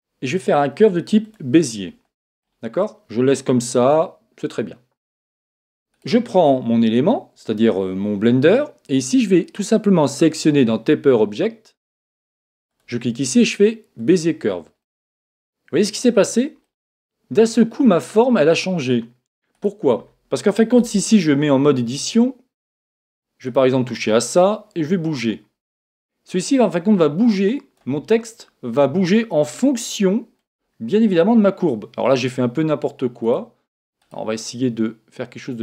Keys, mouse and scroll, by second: 2.4-4.3 middle drag, 5.9 right click, 12.7 click, 14.8-18.5 middle drag, 19.5 right click, 20.9 Tab, 25.0 click, 28.1-29.9 middle drag, 31.0-35.6 middle drag, 33.2 right click.